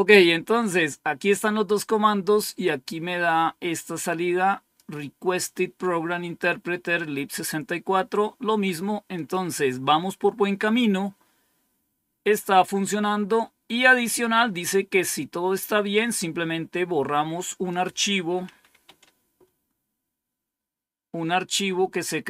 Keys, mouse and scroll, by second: 2.5-4.7 drag, 9.0 click, 9.5 click, 11.6-12.1 scroll down 2, 12.1-12.7 scroll down 1, 17.6 click, 18.4-19.3 typing.